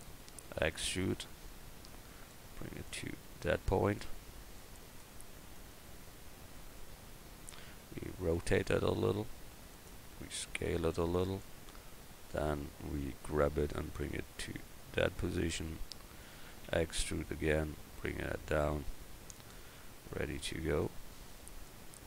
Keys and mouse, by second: 0.6 e, 1.6-7.0 drag, 8.4 r, 10.2 s, 13.6 g, 16.6 e.